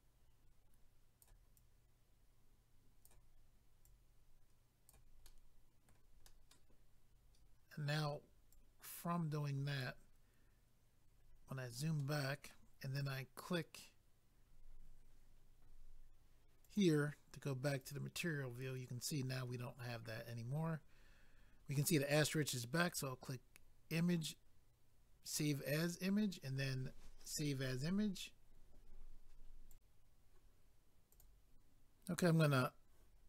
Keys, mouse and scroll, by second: 1.5 click, 3.8 click, 5.2 middle click, 6.2 middle click, 8.5 click, 11.2 scroll down 1, 12.0 middle click, 16.6 click, 16.8 click, 17.8 click, 17.9 click, 18.6-19.8 scroll down 1, 22.8 click, 23.0 click, 25.3 click, 25.4 click, 27.2 click, 27.4 click, 29.7 click, 29.8 click, 31.1 click, 31.2 click.